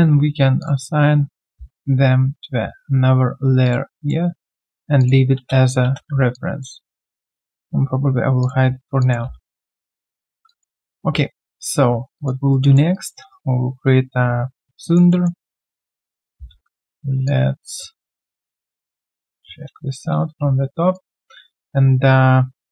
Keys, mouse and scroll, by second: 4.0 double click, 5.8 space, 6.3 alt+click, 6.7 alt+right click, 7.1 alt+click, 8.8 alt+right click, 9.0 alt+click, 9.4 right click, 10.4 alt+click, 11.5 alt+click, 11.8-12.1 alt+scroll down 1, 12.1 alt+click, 12.4 alt+right click, 12.6 alt+click, 12.9 alt+right click, 13.3 shift+right click, 14.8 alt+click, 15.1 alt+middle click, 15.4 alt+click, 20.7 typing, 20.7 alt+right click.